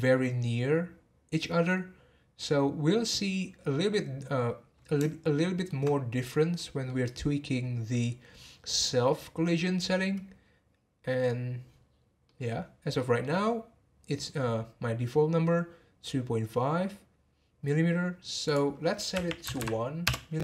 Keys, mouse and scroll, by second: 5.4-9.7 shift+middle drag, 11.8-12.2 scroll down 1, 12.2-16.0 middle drag, 18.4-19.5 drag, 19.5 m.